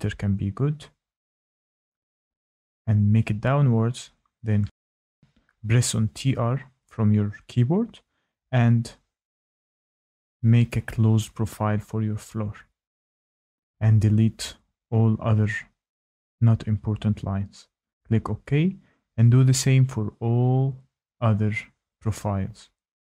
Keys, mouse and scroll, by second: 1.8 click, 2.9 Escape, 3.2-3.9 scroll up 2, 3.9 typing, 4.8 click, 5.4 click, 6.0 click, 6.7 click, 6.7-7.6 scroll, 7.7 click, 7.7-8.4 scroll up 2, 8.4 click, 9.0 click, 9.7 click, 10.3 click, 11.0 click, 11.3 Escape, 12.1 Escape, 14.0 ctrl+click, 14.8 Delete, 18.1-19.1 scroll, 19.3 click, 19.4 click, 20.1-20.7 scroll, 21.9 click, 22.8 shift+right click.